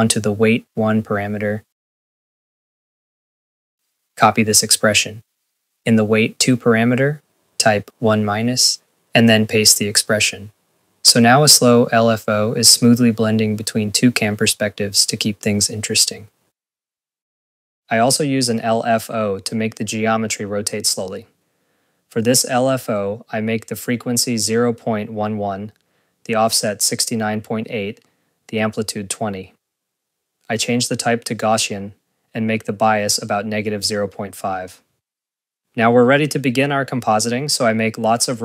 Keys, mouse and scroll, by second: 11.4 ctrl+s, 11.8 scroll, 12.4 click, 13.3 click, 13.6 scroll, 13.8 click, 15.8 scroll, 16.3 click, 16.5 scroll, 17.1 click, 20.1 Return, 20.2 click, 20.5 click, 20.5 ctrl+s, 20.7 click, 21.3 click, 35.3 Return, 35.9 scroll, 36.4 click, 37.0 click, 37.2-38.4 scroll, 37.3 click, 37.3 right click, 37.6 click, 37.8 ctrl+a, 38.0-38.4 typing, 38.2 click, 38.3 ctrl+z.